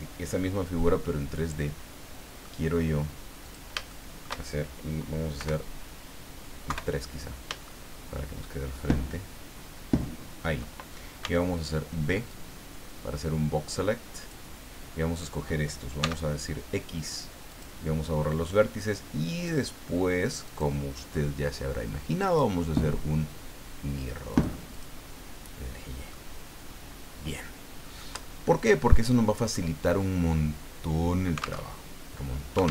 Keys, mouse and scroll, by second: 1.0-2.6 middle drag, 3.4 click, 3.9 shift+right click, 5.4 KP_1, 6.7 KP_3, 7.6-10.6 shift+middle drag, 11.2 b, 12.3-14.5 drag, 16.0 x, 17.5 click, 19.4 click, 20.5 click, 22.3 click, 24.3 click, 24.7 click, 26.1-28.1 middle drag, 29.5-31.6 middle drag, 31.6 alt+Tab.